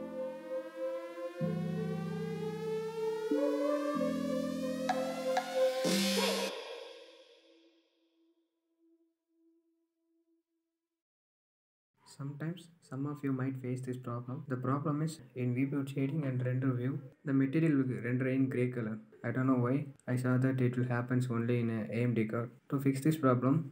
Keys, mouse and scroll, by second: 2.0-11.1 typing, 2.2 middle click, 2.5 click, 2.8 scroll down 2, 2.9 shift+middle click, 3.2 shift+click, 5.2 middle click, 14.5 KP_1, 14.9-15.2 middle drag, 15.2 scroll up 1, 15.4 middle click, 15.6-16.2 scroll down 2, 16.2 click, 16.4-19.5 middle drag, 19.5 scroll up 2, 19.7-20.2 middle drag, 20.2 click, 21.3 click, 21.6 middle click, 21.8 scroll down 3, 22.0-23.2 shift+middle drag, 23.2 click.